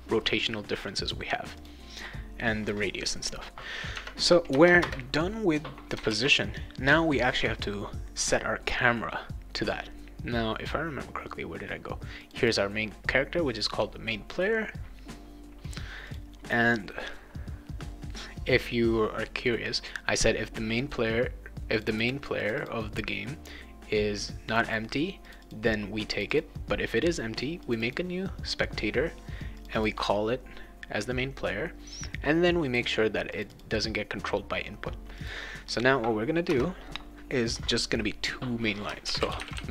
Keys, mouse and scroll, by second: 1.6 click, 3.9 \, 4.5 BackSpace, 6.1 ctrl+s, 12.2 click, 16.1 click, 21.7 click, 21.9 click, 22.4 click, 22.6 click, 24.5 click, 24.7 click, 25.2 click, 25.4 click, 26.1 click, 26.3 click, 27.6 click, 29.6 click, 29.7 click, 33.3 click, 33.5 click, 35.2 click, 36.5 Return, 38.8-39.7 typing.